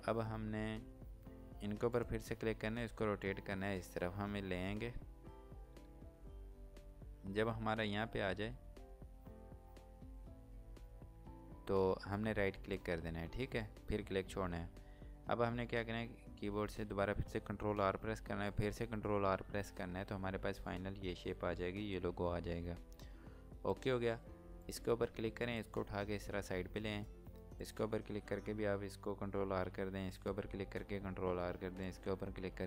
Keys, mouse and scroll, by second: 1.7 click, 15.5 right click, 19.6 typing, 23.6 typing, 23.7 click, 25.0 scroll down 1, 25.5 click, 30.1 click, 31.8 click.